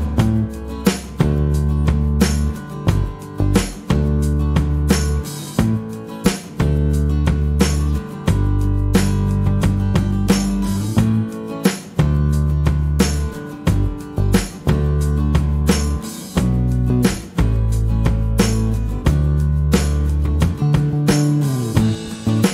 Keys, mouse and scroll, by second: 0.0 -, 1.7 click, 2.3 middle click, 2.9 click, 5.3 middle click, 7.6 click, 8.2 middle click, 8.6 click, 9.6-11.1 drag, 12.8 click, 15.8 click, 19.5 click, 21.5 click.